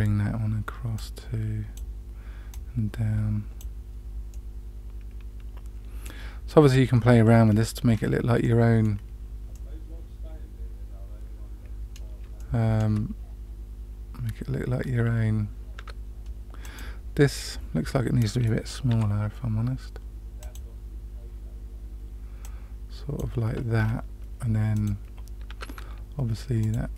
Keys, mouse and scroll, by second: 0.9-1.7 drag, 2.5-3.6 drag, 4.3-6.0 middle drag, 7.4-7.9 scroll down 2, 8.4-8.9 middle drag, 8.4-8.8 scroll down 1, 9.5-12.0 middle drag, 12.3-12.8 shift+middle drag, 15.7 Tab, 16.6 click, 18.8 s, 22.4 click, 23.7-24.7 scroll up 2, 24.7 click, 25.4 Tab, 26.5 click.